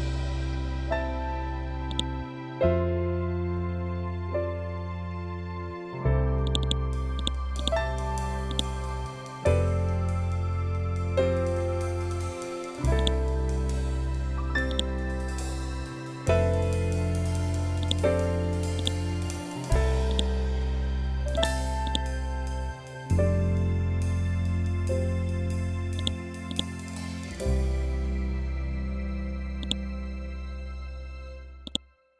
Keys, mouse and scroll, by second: 1.4-2.8 drag, 2.8 scroll up 1, 4.1 ctrl+End, 5.9-9.7 drag, 9.7 scroll up 1, 12.4-14.2 drag, 15.6 scroll down 1, 17.3 click, 22.5 scroll up 1, 23.4 Up, 24.5 scroll down 1, 25.4 click, 27.1 scroll up 1, 29.1 shift+click.